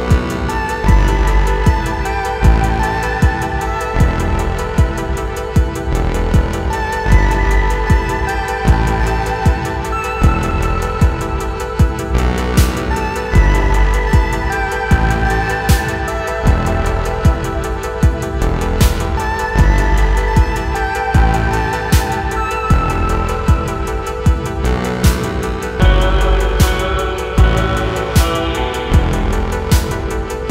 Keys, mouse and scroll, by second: 0.0-20.5 typing, 0.1 shift+click, 1.2 click, 1.3 middle click, 2.2 click, 4.0 click, 4.7 click, 4.9 shift+middle click, 5.6 scroll down 3, 5.7 shift+middle click, 6.4 click, 6.6 click, 6.7 scroll down 5, 6.7 middle click, 6.9 alt+click, 7.0 middle click, 8.0-8.4 scroll up 1, 8.9 middle click, 9.0 scroll up 1, 9.1 shift+middle click, 9.4 shift+middle click, 9.6 scroll up 1, 9.7 shift+middle click, 10.1 middle click, 10.3 shift+middle click, 10.7 scroll up 2, 11.7 alt+m, 12.2 scroll up 2, 12.2 shift+middle click, 12.5 alt+shift+click, 12.8 alt+shift+click, 14.3 ctrl+z, 14.3 ctrl+z, 14.8 alt+Left, 15.1 Tab, 15.2 middle click, 15.8 Tab, 15.9 alt+click, 16.5 Tab, 16.6 shift+middle click, 16.7 scroll down 3, 16.8 shift+middle click, 16.8 scroll up 1, 17.4 click, 17.5 middle click, 17.6 shift+click, 17.7 scroll down 1, 17.7 middle click, 17.8 middle click, 18.0 click, 18.1 middle click, 18.2 shift+click, 18.3 shift+middle click, 18.4 shift+click, 18.6 middle click, 18.7 shift+click, 19.0 shift+middle click, 19.3 scroll up 1, 19.4 middle click, 19.5 shift+click, 19.6 middle click, 19.8 Tab, 19.9 shift+middle click, 20.0 scroll up 2, 20.0 shift+middle click, 20.1 Tab, 20.7 middle click, 21.0 scroll down 1, 21.2 middle click, 21.2 Tab, 21.3 scroll up 2, 21.4 shift+middle click, 21.7 click, 21.7 middle click, 21.9-22.8 typing, 22.3 click, 22.9 scroll down 2, 22.9 shift+middle click, 23.1 scroll up 2, 23.2-23.8 scroll down 2, 23.8 middle click, 24.0 s, 24.8 click, 25.3 shift+s, 26.0 s, 26.3 click, 26.7 middle click, 27.0-30.5 typing, 27.8 shift+middle click, 27.8-28.2 scroll up 2, 28.0 shift+middle click.